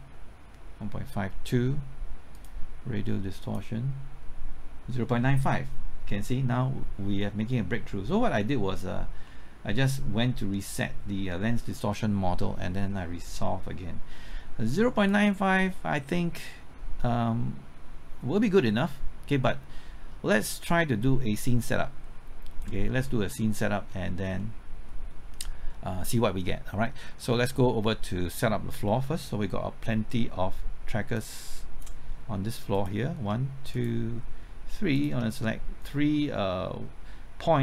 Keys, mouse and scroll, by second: 9.2 middle click, 15.1-23.1 drag, 23.2 middle click, 24.0-24.4 scroll up 1, 24.4 middle click, 25.2-25.7 scroll up 1, 25.7-27.0 scroll down 1, 27.2 middle click, 31.1 click, 33.7 shift+click, 34.9 shift+click.